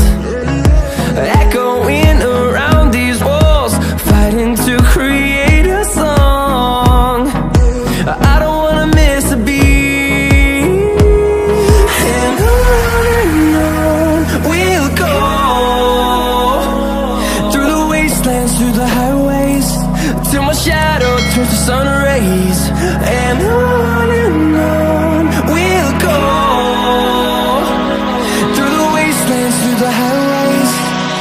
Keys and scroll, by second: 29.2 ctrl+shift+a.